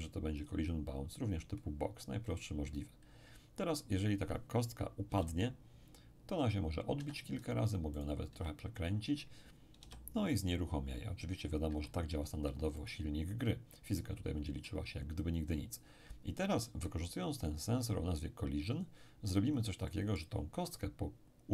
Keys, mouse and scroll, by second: 0.4 click, 5.1 p, 7.0 Escape, 8.0 right click, 8.3 r, 8.8 click, 9.8 p, 11.7 Escape, 12.8-15.6 middle drag, 19.3-19.8 scroll down 1, 19.8-21.1 middle drag.